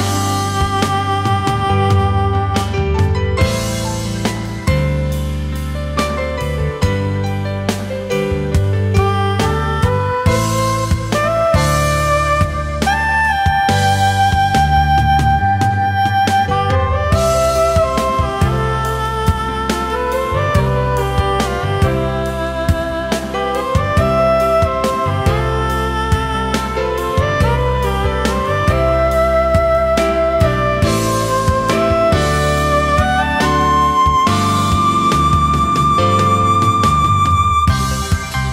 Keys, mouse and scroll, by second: 8.4 alt+scroll down 1, 8.7 space, 9.5-9.8 alt+scroll up 1, 9.8 space, 10.7-12.0 alt+scroll up 1, 13.0 ctrl+z, 13.9 space, 14.6-15.0 alt+scroll up 1, 15.1 space, 17.6 space, 25.9 alt+scroll up 1, 26.3 space, 35.0 space.